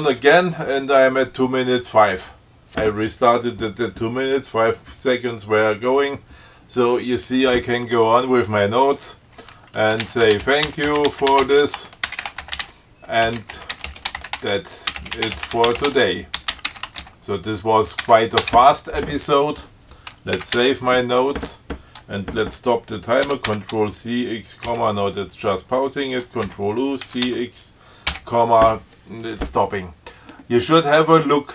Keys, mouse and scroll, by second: 10.1-18.3 typing, 18.7 Return, 20.7 ctrl+x, 20.9 ctrl+s, 23.6 ctrl+c, 23.7 ctrl+x, 25.0 ,, 26.7 ctrl+u, 27.4 ctrl+c, 27.6 ctrl+x, 28.4 ,.